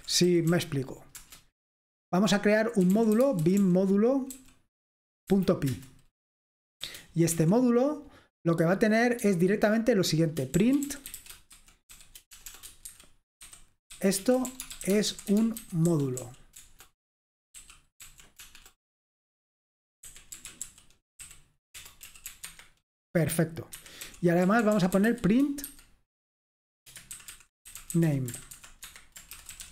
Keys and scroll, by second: 0.0-1.2 typing, 2.7-5.3 typing, 6.9-7.5 typing, 10.5-18.6 typing, 20.2-22.3 typing, 22.5 Escape, 23.8-25.8 typing, 27.1-29.7 typing.